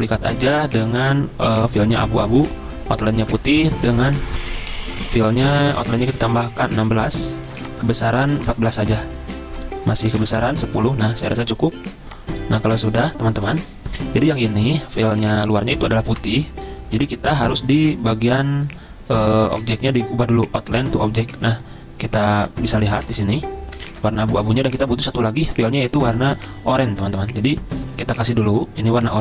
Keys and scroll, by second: 4.4 F10, 4.4 F10, 8.4-10.2 typing, 10.4 Return, 12.2-13.3 typing, 23.9 ctrl+z.